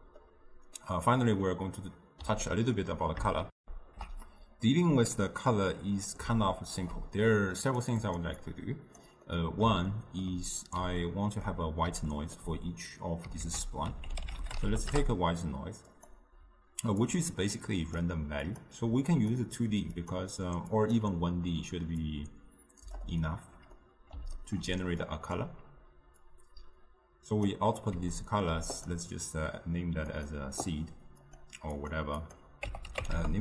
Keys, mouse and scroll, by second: 15.0 ctrl+a, 18.0 click, 19.4-30.3 drag, 31.8-33.4 drag.